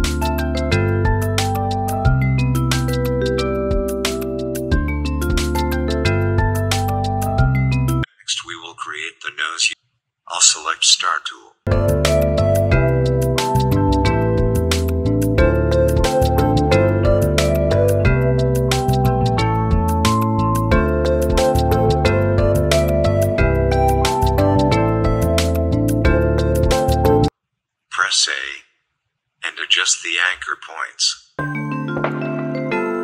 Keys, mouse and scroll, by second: 2.4 ctrl+c, 2.7 ctrl+f, 3.2 click, 5.4 ctrl+g, 6.1 shift+click, 9.1 right click, 10.1 click, 10.9 alt+shift+click, 13.9 shift+click, 15.1 shift+click, 16.1-18.3 drag, 18.3-21.5 shift+drag, 22.8 click, 24.2-25.5 alt+shift+drag, 26.8 click, 27.6 Up, 28.4 click, 28.9 Up, 29.5 click, 29.5-32.5 drag.